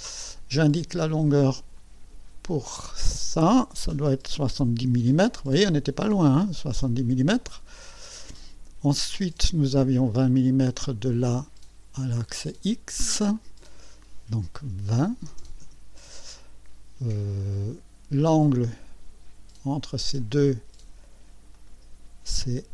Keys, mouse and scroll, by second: 1.7 click, 3.9 KP_7, 6.4 KP_0, 7.5 click, 10.4 click, 12.1 click, 13.3 click, 14.9 KP_2, 15.3 KP_0, 15.6 KP_Enter, 18.4 click, 20.2 click, 21.5 click.